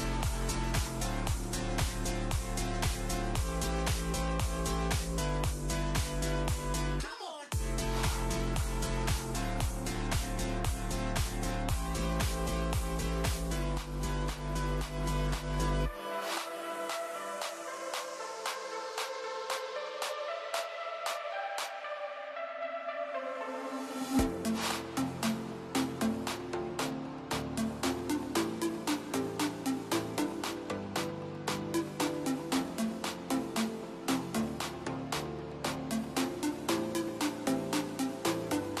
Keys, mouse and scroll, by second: 2.0-5.9 drag, 5.9 KP_1, 8.2 click, 10.1 click, 10.7-13.3 drag, 15.6 click, 16.9-19.4 drag, 23.2 click, 24.1 click, 32.3 click, 37.1-38.8 drag.